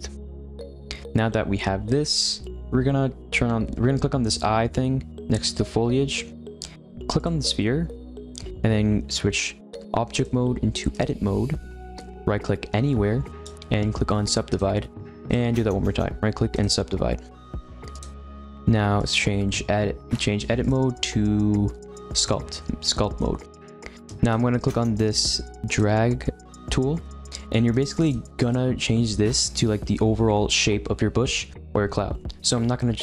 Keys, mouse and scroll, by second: 0.2-3.2 middle drag, 6.0 click, 7.1 click, 10.1-13.2 drag, 13.3-17.9 right drag, 17.9-19.0 drag, 20.6-22.8 drag, 22.8-25.7 middle drag, 25.7-28.5 drag, 28.5-31.6 middle drag.